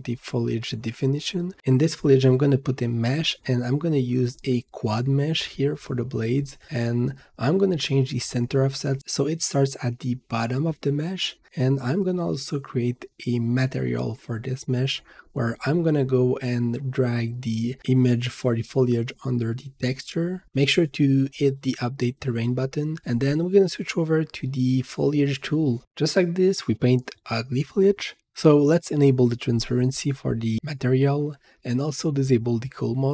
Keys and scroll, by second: 8.1 Return, 8.2-9.4 typing, 22.5 v, 25.9 h.